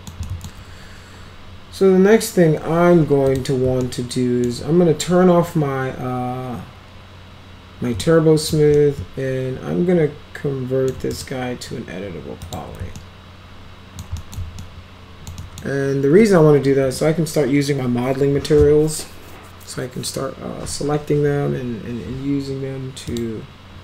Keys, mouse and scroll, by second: 0.2 alt+middle click, 3.3 click, 3.9 alt+middle click, 8.0 alt+middle click, 8.8-10.9 alt+middle drag, 11.1 right click, 11.4 scroll down 2, 12.4 click, 13.0-14.0 alt+middle drag, 14.2 middle click, 14.6-15.3 alt+middle drag, 15.4 middle click, 16.8 m, 23.1 click.